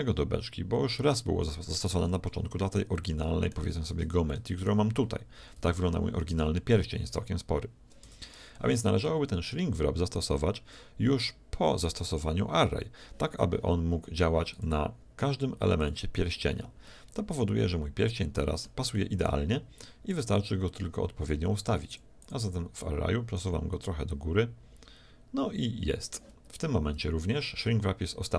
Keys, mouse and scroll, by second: 2.3 z, 3.0 middle click, 3.5 z, 3.9 Tab, 5.4 a, 5.6 a, 6.4 a, 8.1 Tab, 14.5-17.6 drag, 17.0-18.7 middle drag, 18.9-20.7 middle drag, 20.1-25.2 drag.